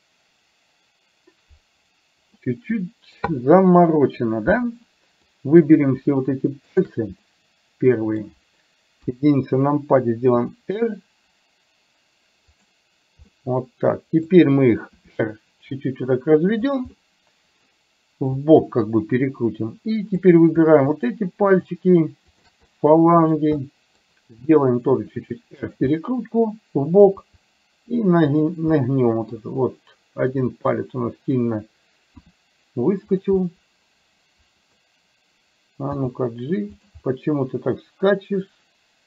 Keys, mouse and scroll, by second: 2.4 middle click, 5.4 middle click, 7.4-8.4 middle drag, 9.1 KP_1, 10.4 r, 13.4-14.4 middle drag, 15.0 r, 17.0 middle click, 20.9 shift+click, 21.6 shift+click, 22.5 shift+click, 22.7 middle click, 23.7 middle click, 25.0 r, 26.0-27.2 middle drag, 27.2 r, 28.9 middle click, 30.9 middle click, 32.2 r, 33.5-34.9 middle drag, 36.0 g, 37.1-39.0 middle drag.